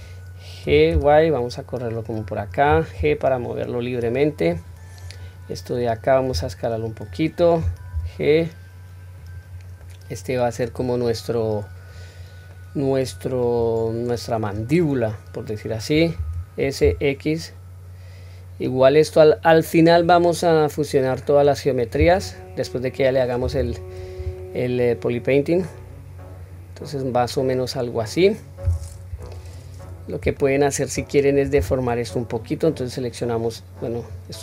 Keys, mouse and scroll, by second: 0.6 g, 5.0 click, 6.3 s, 7.9 g, 9.8-10.7 middle drag, 11.0-11.6 middle drag, 11.9-12.5 scroll down 1, 12.5-13.5 middle drag, 12.5-13.5 scroll down 1, 14.0-14.5 drag, 14.8-15.7 middle drag, 16.2 s, 20.3-21.6 middle drag, 22.0 Tab, 22.6-23.3 scroll up 1, 23.3 scroll up 1, 23.5 q, 24.0-24.3 scroll down 1, 24.3-28.4 middle drag, 29.1 KP_1, 29.5-30.2 scroll up 1, 30.3-30.8 shift+middle drag, 31.5 Tab, 32.5-34.1 drag.